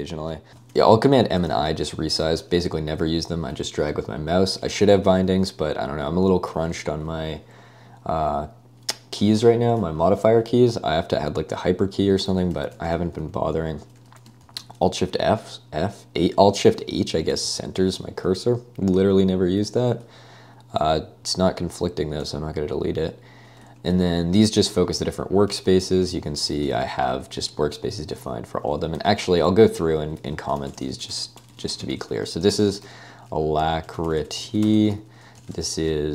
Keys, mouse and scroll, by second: 0.3-1.3 typing, 1.5 Escape, 6.9 Escape, 12.1-14.5 typing, 16.6 Escape, 16.7-19.5 typing, 18.0 Escape, 21.2 ctrl+d, 22.2-22.9 typing, 23.7 Escape, 24.0-36.1 typing.